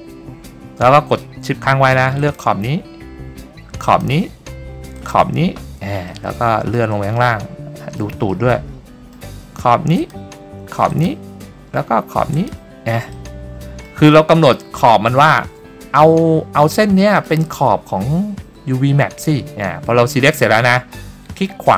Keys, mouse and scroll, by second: 2.3 shift+click, 4.0 shift+click, 5.1 shift+click, 6.2 shift+middle click, 7.3 middle click, 8.4 middle click, 10.1 shift+click, 11.0 shift+click, 12.5 shift+click, 13.3 middle click, 14.3 middle click, 16.7 middle click.